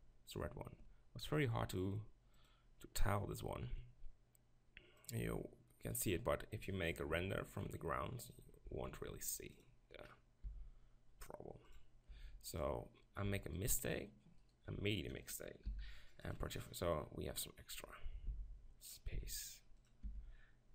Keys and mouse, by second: 0.0-4.1 drag, 5.0-6.7 drag, 6.9 ctrl+KP_Decimal, 8.7 s, 10.5 s, 11.8 click, 12.2 g, 13.3 click, 13.7 click, 13.8 right click, 14.0-16.4 drag, 15.7 u, 18.4 s, 19.2 s, 20.1 g.